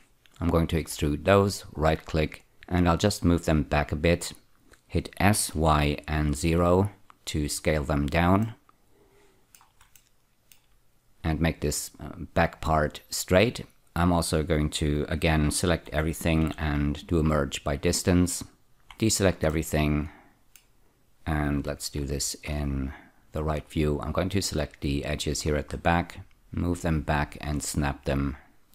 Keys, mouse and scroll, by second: 0.8 4, 1.6 right click, 2.5 click, 5.2 s, 5.5 y, 6.4 0, 7.6 click, 8.4 middle click, 10.0 shift+middle click, 16.4 typing, 17.3 click, 18.8 a, 19.5 middle click, 21.6 F3, 22.5-23.8 scroll down 1, 23.8 click, 25.5-26.6 scroll up 3, 26.7 click.